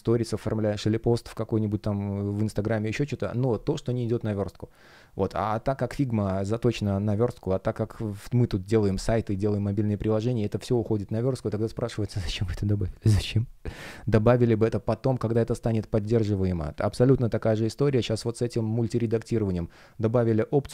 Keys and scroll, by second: 10.4 space.